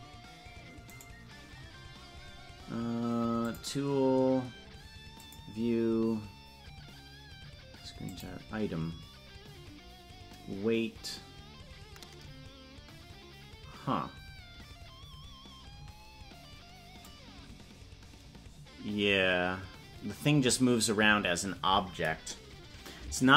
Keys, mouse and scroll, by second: 0.8-3.4 right drag, 3.4 click, 5.1 click, 8.0 click, 17.1-23.3 drag.